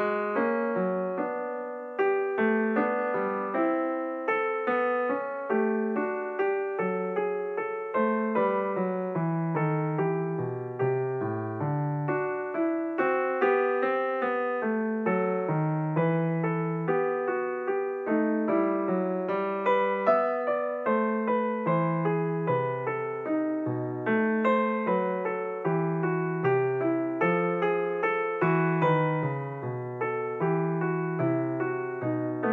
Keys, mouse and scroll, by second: 0.5-2.2 drag, 2.2 g, 7.9 e, 11.6 s, 15.3 e, 17.3 e, 20.8 s, 25.8 g, 29.1 e, 31.5 e.